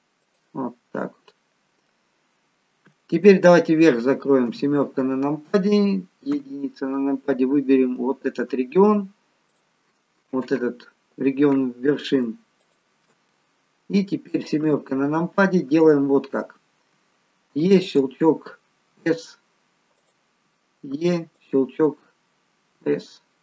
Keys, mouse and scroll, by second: 1.2 middle click, 2.5-4.1 scroll down 3, 3.0 middle click, 4.5 KP_7, 6.3 KP_1, 7.6 scroll up 2, 7.9 shift+middle click, 9.5 click, 12.7 alt+shift+click, 13.3 middle click, 14.6 KP_7, 18.1 e, 18.9 s, 20.8 e, 22.8 s.